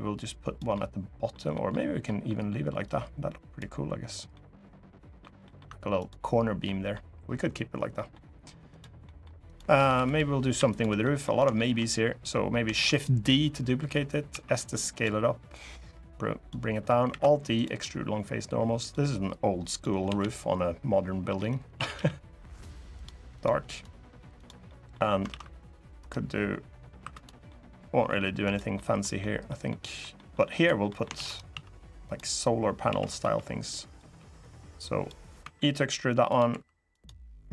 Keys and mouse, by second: 0.5 middle click, 0.9 click, 1.3 middle click, 1.8 middle click, 2.6 click, 4.1 middle click, 5.2 middle click, 5.4 Tab, 5.7 click, 6.4 middle drag, 7.7 middle click, 8.5 click, 8.8 middle click, 9.2 click, 9.5 Tab, 9.7 3, 10.4 shift+click, 10.7 middle click, 11.3 shift+middle click, 12.5 shift+d, 12.6-14.0 drag, 14.0 s, 14.7 click, 15.3 click, 16.8 alt+e, 18.5 click, 19.5 click, 19.8 l, 21.0 g, 21.5 a, 21.7 g, 22.7 click, 23.1 click, 24.4 middle click, 25.0 ctrl+r, 26.7 3, 27.2 middle click, 28.5 middle click, 28.9 middle click, 29.4 middle click, 29.9 middle click, 30.6 middle click, 30.9 shift+d, 31.2 s, 31.8 click, 32.6 s, 32.9 y, 33.6 click, 34.1 click, 35.2 e, 36.0 click, 36.2 2, 36.7 click, 37.4-37.5 drag.